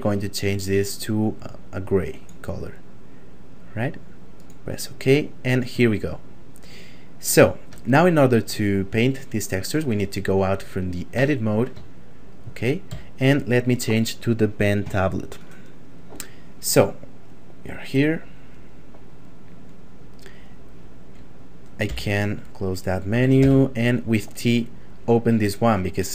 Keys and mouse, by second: 4.3 click, 6.0 shift+middle click, 7.7 middle click, 11.1 Tab, 11.9 shift+middle click, 12.9 a, 19.6 click, 21.9 n, 23.4 t, 24.9 click.